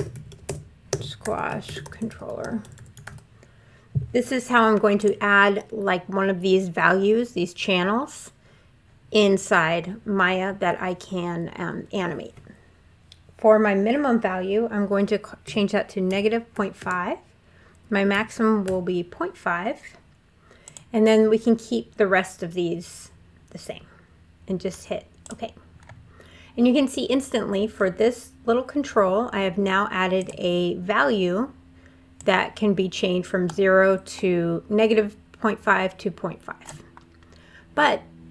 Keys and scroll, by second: 0.0-2.9 typing, 0.7 Delete, 15.2 -, 15.9 ., 16.3 5, 16.6 Tab, 17.9 ., 18.4 5.